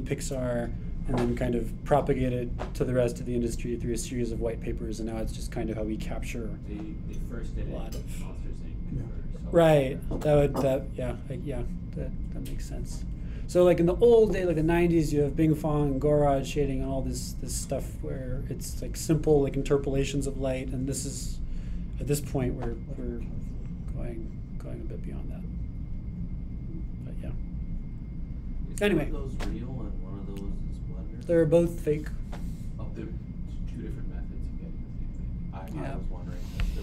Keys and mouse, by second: 9.4-36.8 drag.